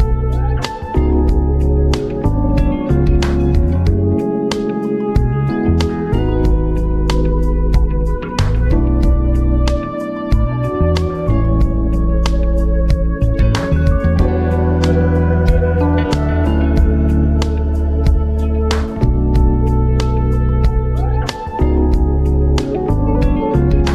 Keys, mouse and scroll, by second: 0.0-2.8 typing, 2.9 Escape, 3.1 Right, 4.6 Up, 4.7 Right, 5.1 Down, 5.3 Right, 9.1-11.4 drag, 11.4 ctrl+alt+scroll up 1, 11.6 scroll down 2, 11.8 scroll up 2, 12.2 scroll down 1, 12.5 ctrl+alt+scroll up 1, 12.8 ctrl+t, 13.3 alt+shift+click, 14.1 ctrl+alt+scroll down 1, 14.7 Return, 14.8 v, 14.9 Right, 15.7 Return, 17.2 ctrl+t, 17.4 ctrl+alt+scroll up 1, 18.1 alt+shift+click, 19.1 ctrl+alt+scroll down 1, 19.7 Return, 20.2 click, 20.4 ctrl+alt+scroll down 1, 20.8 v, 20.9 Right, 21.6 ctrl+alt+scroll down 1.